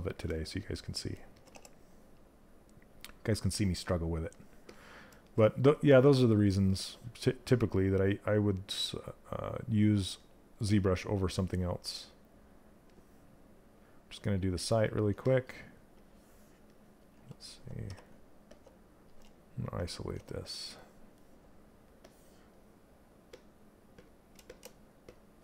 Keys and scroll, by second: 1.0 w.